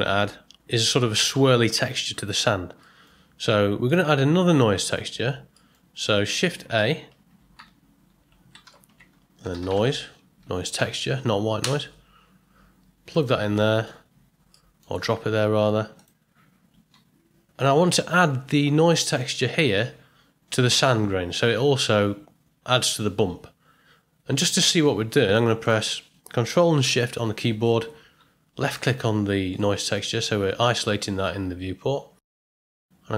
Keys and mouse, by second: 2.9 middle click, 3.9 ctrl+middle click, 5.6 middle click, 6.3 ctrl+middle click, 6.8 click, 7.5 n, 8.6 shift+a, 13.5 ctrl+middle click, 14.6 middle click, 15.9 click, 24.6-25.1 drag, 28.7 ctrl+shift+click.